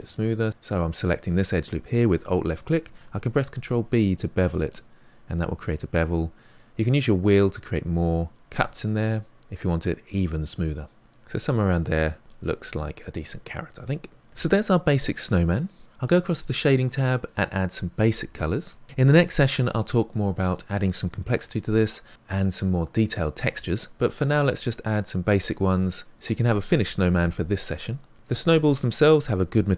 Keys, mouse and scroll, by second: 3.5 ctrl+b, 11.8 middle click, 12.5 scroll down 2, 12.7 Tab, 12.9-18.6 middle drag, 18.6-28.3 drag.